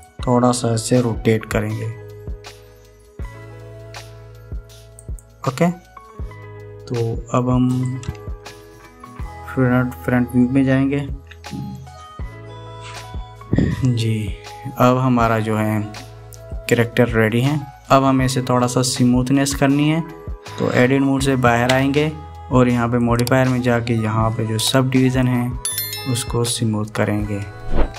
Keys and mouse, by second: 2.4 r, 8.6 click, 9.7 KP_1, 11.8 KP_1, 14.0-16.9 middle drag, 17.2 middle click, 22.5 Tab, 23.7-26.2 drag, 27.2-27.9 middle drag.